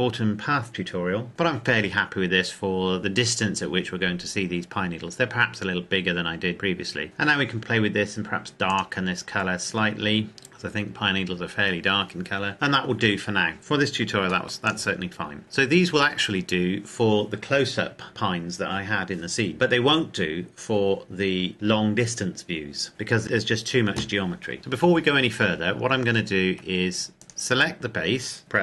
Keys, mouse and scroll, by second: 3.0-4.3 scroll down 1, 6.5-7.0 scroll down 1, 7.6 click, 10.8-13.1 scroll down 1, 14.2 ctrl+Num_Lock, 14.2 scroll down 1, 14.3 ctrl+s, 14.8 click, 15.4-16.8 scroll down 1, 22.9 click, 25.2-25.8 scroll up 1, 26.1-26.6 shift+scroll down 1, 27.3 right click.